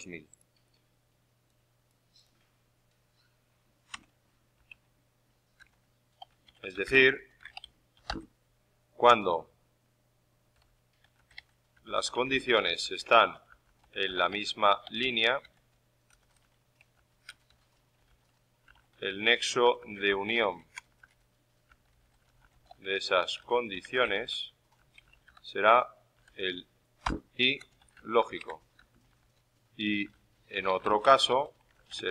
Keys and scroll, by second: 27.0-32.1 typing.